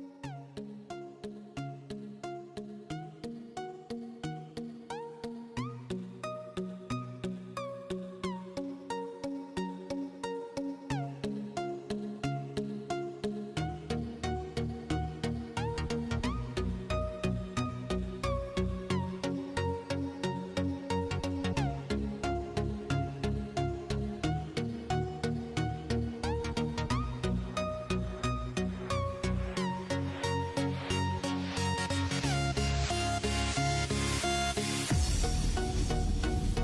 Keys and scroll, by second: 1.6-8.7 typing, 11.8-15.3 typing, 18.0-18.9 typing, 21.3-24.9 typing, 26.3-27.2 typing, 30.9-34.7 typing.